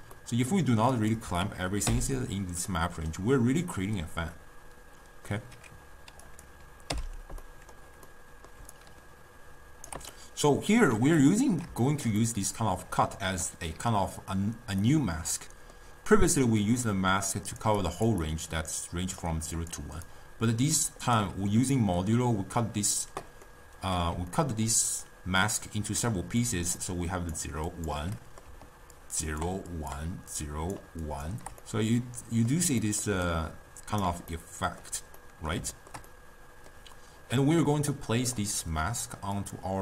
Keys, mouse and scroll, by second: 1.0 click, 2.0 m, 2.8-5.8 middle drag, 6.4 click, 7.0 m, 7.5-8.7 middle drag, 8.7 d, 8.9-10.2 right drag, 10.2-13.0 middle drag, 13.0 d, 13.5 d, 14.0-16.4 middle drag, 16.4-20.1 typing, 17.1 click, 17.9 click, 18.5 click, 18.9 click, 19.7 click, 20.2-21.3 right drag, 21.3 d, 23.6-26.6 middle drag, 26.6-31.4 typing, 26.9 click, 27.8 click, 28.3 middle click, 29.1-29.5 drag, 29.9 click, 30.5 click, 31.2 click, 31.7-33.2 middle drag, 33.2 d, 33.4 right click, 34.2 d, 34.5-38.0 middle drag, 38.0 click, 39.5 click.